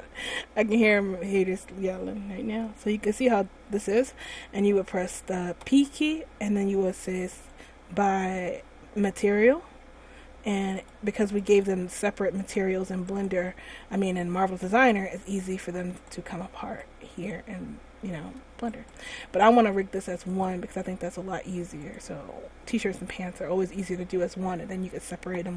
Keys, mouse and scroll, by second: 5.8 p, 10.9 click, 11.9 click, 12.6 right click, 13.3 right click, 14.6 g, 16.2 right click, 16.8 g, 18.8 shift+right click, 20.5 click, 22.0 click.